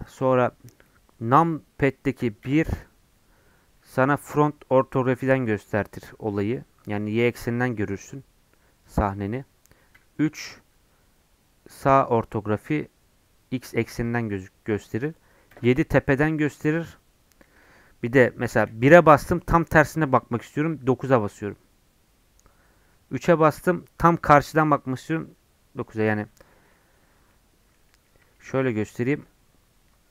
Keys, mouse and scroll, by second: 0.1-2.4 middle drag, 2.4 KP_1, 9.9 KP_Enter, 10.6 KP_3, 15.5 KP_7, 18.5 KP_1, 20.6 KP_9, 22.9 KP_3, 25.0 KP_9, 27.3-30.1 middle drag.